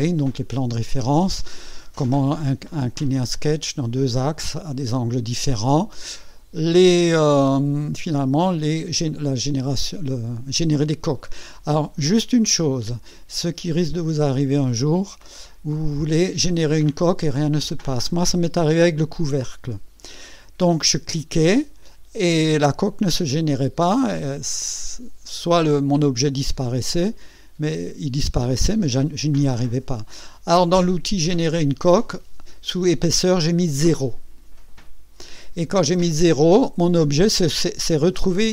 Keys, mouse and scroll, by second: 1.0-3.3 drag, 13.8-16.0 drag, 23.5-24.8 drag.